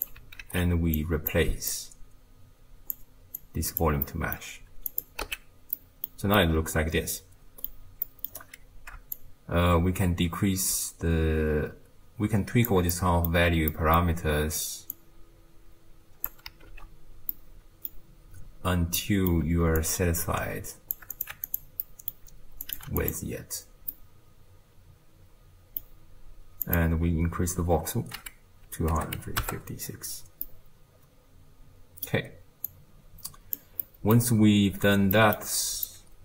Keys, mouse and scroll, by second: 0.0 click, 0.4 ctrl+x, 1.0 click, 1.7 drag, 3.4 click, 4.1-5.0 middle drag, 5.0 click, 5.3 x, 5.8-8.4 middle drag, 8.4-9.2 scroll up 1, 9.2-12.2 shift+drag, 12.9-14.9 middle drag, 14.9-16.8 shift+drag, 16.8 ctrl+z, 17.4-19.8 middle drag, 19.8-21.6 shift+drag, 21.8 middle click, 22.7 click, 23.9-26.7 middle drag, 26.7-29.7 drag, 30.5-32.7 middle drag, 32.7 click, 33.8 middle click, 34.5-35.1 scroll down 5, 35.1-35.9 middle drag, 35.9 click.